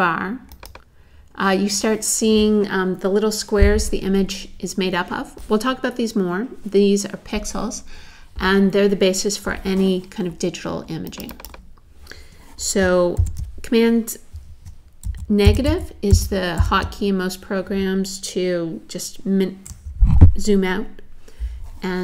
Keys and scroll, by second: 13.2 super+0, 15.1 super+-.